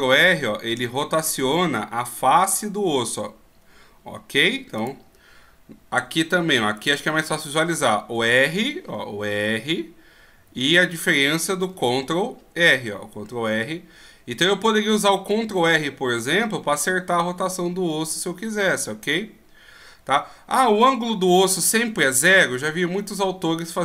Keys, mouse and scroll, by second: 6.8 right click, 8.2 r, 11.7 ctrl+r.